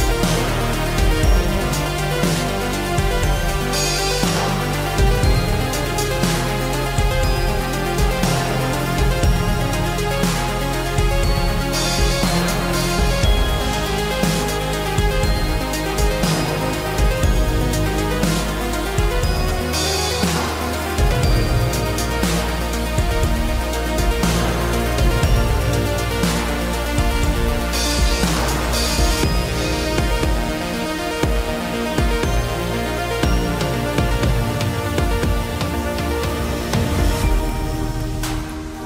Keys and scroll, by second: 14.5 ctrl+t, 26.2 ctrl+l, 37.0 ctrl+u.